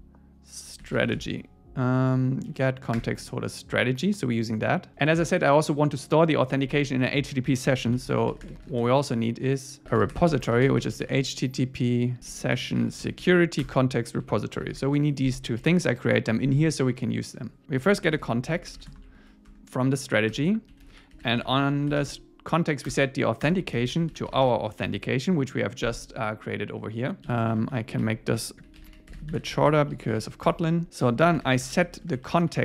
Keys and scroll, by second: 2.0 Down, 3.0 Return, 4.9 Return, 13.6 Return, 15.6 super+s, 19.5 Tab, 20.4 Return, 22.9 Return, 24.9 Tab, 27.2 alt+shift+Left, 27.9 alt+shift+Left, 28.0 alt+shift+Right, 29.5 Home, 29.9 Down, 30.2 super+Right, 30.5 Return.